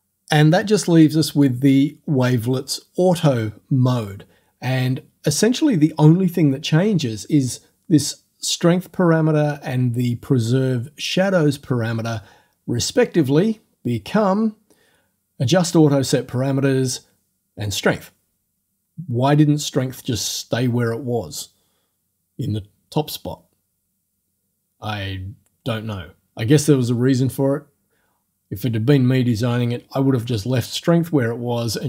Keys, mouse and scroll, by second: 13.6 scroll down 2, 25.5 scroll up 2.